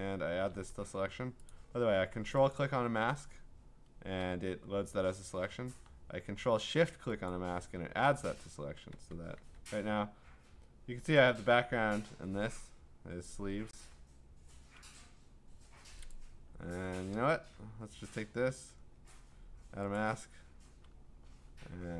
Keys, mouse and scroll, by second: 1.5 click, 1.6 ctrl+click, 2.6 ctrl+click, 7.3 click, 9.3 q, 13.7 q, 16.1 click, 16.7 q, 18.3 q, 20.0 click.